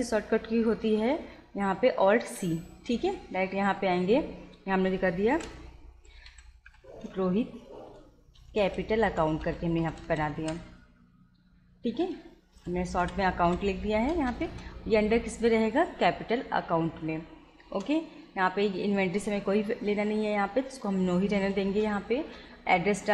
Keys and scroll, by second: 2.3 alt+c, 5.4-10.9 typing, 12.1 space, 12.6 shift+a, 13.1 /, 13.5 c, 14.2 Return, 17.7 Return, 21.6 Return.